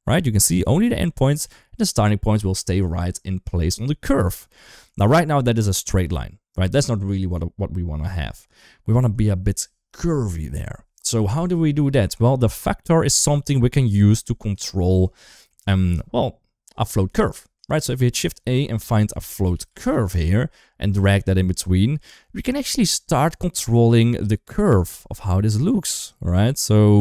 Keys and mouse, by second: 0.6 ctrl+z, 4.5 shift+middle drag, 12.2 click, 13.8 shift+middle click, 14.6 shift+middle click, 15.1 shift+middle click, 17.6 shift+a, 21.4 shift+middle click, 22.1 shift+middle click, 23.7 click, 24.4-24.7 drag, 25.1 click, 26.0 click, 26.7 drag.